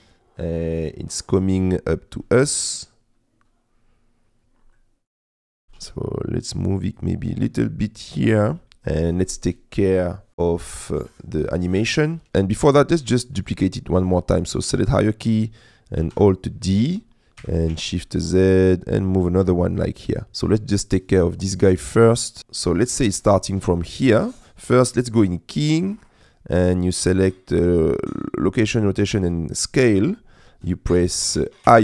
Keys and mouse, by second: 2.2 middle click, 4.9 middle click, 5.5 g, 5.8 z, 8.6 middle click, 12.6 click, 13.0 click, 13.4-14.6 drag, 16.3 alt+d, 17.4 g, 17.8 shift+z, 19.5 click, 21.1 click, 21.6 click, 25.6-30.3 drag.